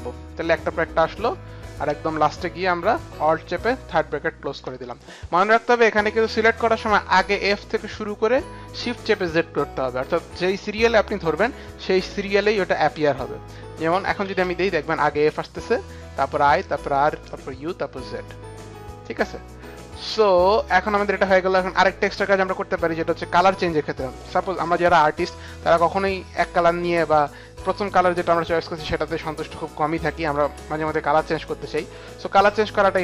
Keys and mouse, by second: 1.7 click, 3.1 click, 4.5 click, 5.8 click, 13.5 click, 14.3 click, 14.3 space, 20.1 click, 22.9 click, 24.1 click, 28.0 shift+click, 31.1 click, 32.3 click.